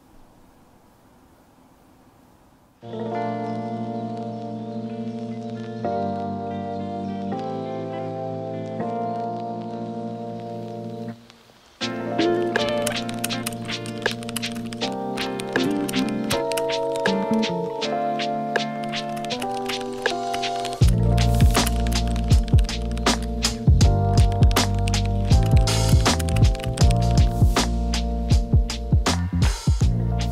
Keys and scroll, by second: 0.5 super+w, 2.0 super+h.